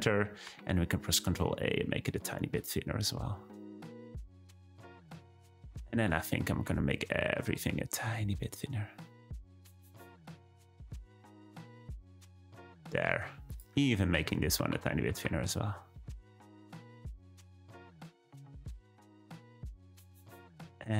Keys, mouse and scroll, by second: 0.5 ctrl+a, 5.7 scroll down 2, 5.9 a, 6.5 ctrl+a, 9.6 click, 9.7 Tab, 10.1-10.5 scroll down 2, 10.5 z, 11.3 click, 11.8-12.8 middle drag, 12.8-13.5 scroll up 1, 13.5 click, 14.1 Tab, 14.6 a, 15.1 ctrl+a, 18.3 Tab, 18.8 `, 20.6 click.